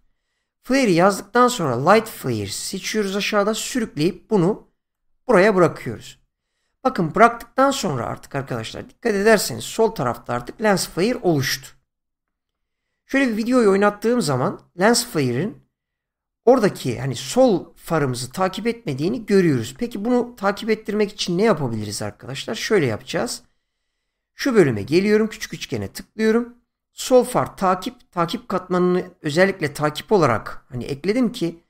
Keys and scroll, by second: 9.8 shift+,.